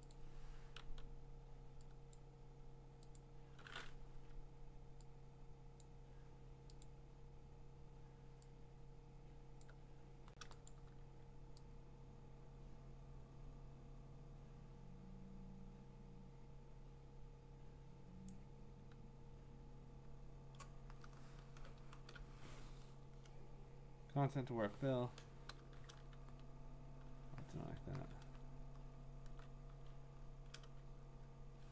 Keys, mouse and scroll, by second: 0.1 click, 0.6-1.3 typing, 2.1 click, 4.1 Escape, 5.8 click, 6.8 click, 9.6 click, 10.7 click, 18.2 click, 21.8 F5, 23.0 Return, 25.8 Return, 27.9 ctrl+d, 28.5-29.1 scroll, 29.9-30.9 scroll.